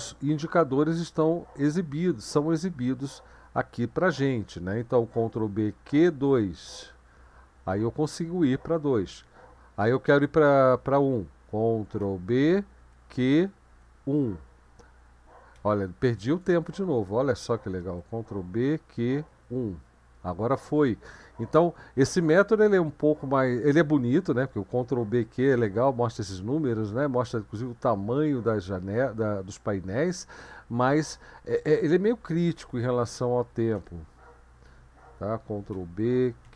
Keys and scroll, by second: 5.1 ctrl+b, 5.8 q, 6.5 2, 12.0 ctrl+b, 12.8 q, 13.8 1, 16.3 BackSpace, 17.6 ctrl+b, 18.5 q, 19.3 1, 25.0 ctrl+b, 25.4 q, 32.4 ctrl+b, 33.0 q, 33.7 1, 35.7 ctrl+b, 36.2-36.5 typing.